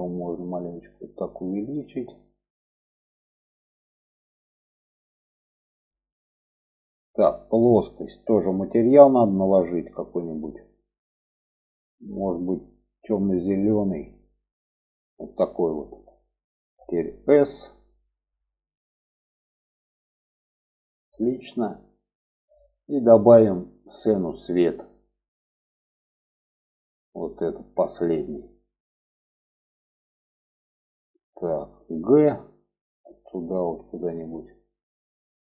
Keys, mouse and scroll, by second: 4.3 g, 7.6 click, 9.3 click, 12.3 click, 17.5 s, 24.2-28.4 drag, 29.0-30.6 middle drag, 32.7 g, 35.2 click.